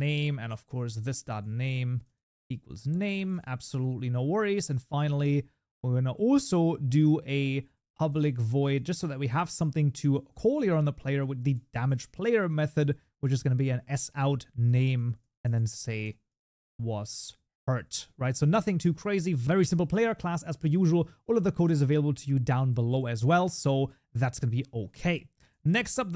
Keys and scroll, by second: 13.4 Tab, 23.7 Tab.